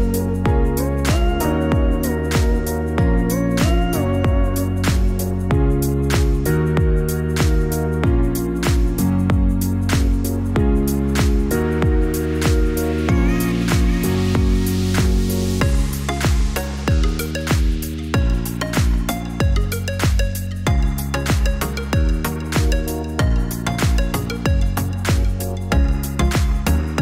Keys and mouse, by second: 4.2-9.7 drag, 12.2 click, 17.7 click, 18.6 click, 20.9 click.